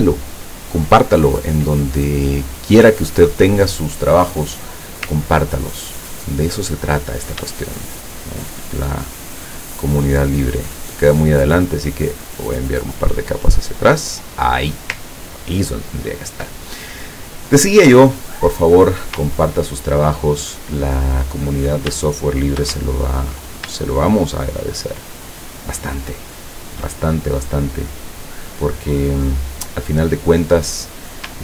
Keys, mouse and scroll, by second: 5.7-6.2 ctrl+scroll up 1, 6.9 ctrl+click, 7.8 shift+click, 11.5 click, 12.1 click, 12.5 click, 13.0 click, 13.5 click, 15.3-15.9 ctrl+scroll down 2, 19.4-19.8 ctrl+scroll up 1, 20.3 ctrl+click, 20.8 scroll up 1, 21.2 click, 22.1 shift+scroll down 1, 24.1 shift+click, 25.3 shift+click, 26.3 shift+click, 29.7 middle click.